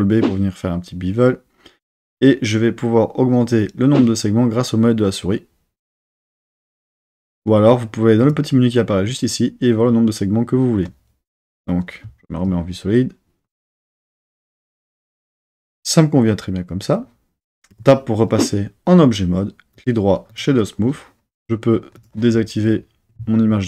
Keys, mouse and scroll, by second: 6.9 click, 8.2 click, 12.1 z, 17.7 Tab, 19.7-20.7 right drag, 21.9 click.